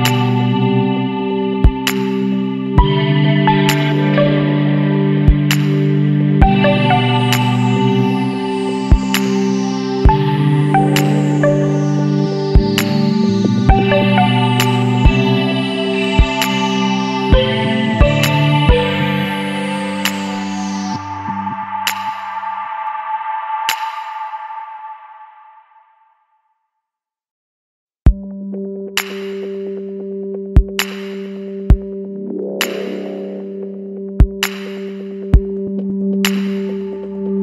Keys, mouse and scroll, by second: 1.0 middle click, 1.4 ctrl+s, 1.7 scroll down 2, 1.9 middle drag, 2.1-2.5 scroll up 2, 2.2 alt+a, 2.5-3.3 middle drag, 3.3-3.7 scroll up 2, 3.8-7.0 middle drag, 7.0 click, 7.3 scroll down 2, 7.5 middle click, 7.7-8.4 scroll up 2, 9.5 click, 11.1-14.1 shift+drag, 15.9 alt+a, 16.1 scroll down 2, 16.3 middle click, 16.9-17.5 scroll up 1, 17.5-18.8 shift+middle drag, 18.8-21.9 shift+drag, 22.6 click, 23.2 scroll down 2, 23.3-25.2 middle drag, 25.2 click, 26.6-29.2 drag, 29.2-29.5 scroll up 2, 29.5 scroll down 1, 29.6-31.8 middle drag, 31.8-32.9 drag, 32.9 KP_9, 34.5-37.4 drag.